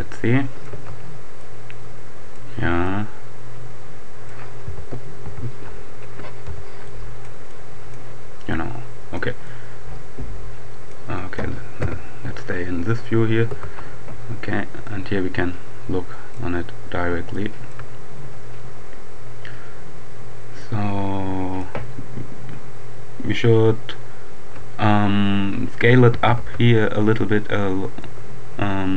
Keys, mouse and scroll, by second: 0.7 Tab, 1.4-4.8 drag, 4.6 z, 6.3 z, 6.9 click, 8.6-9.7 drag, 11.2 click, 11.8 KP_7, 13.3 Tab, 14.2 scroll down 2, 14.4-14.9 scroll up 2, 16.2 right click, 16.7-17.4 scroll up 2, 17.4 shift+click, 18.1-18.6 shift+scroll up 1, 20.6-22.1 drag, 26.0 s, 26.4 x, 27.8 right click.